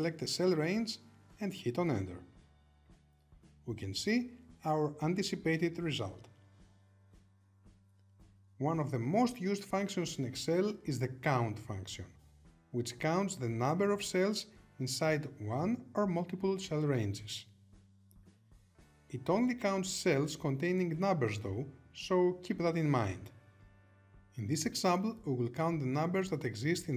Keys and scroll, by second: 5.2 Return.